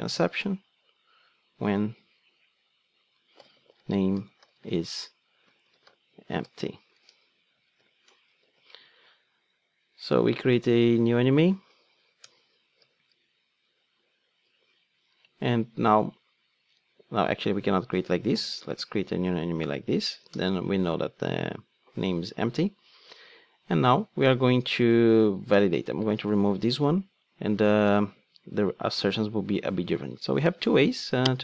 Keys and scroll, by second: 0.3 super+v, 10.8 super+x, 13.0 alt+Return, 18.8 ctrl+space, 26.2 super+x.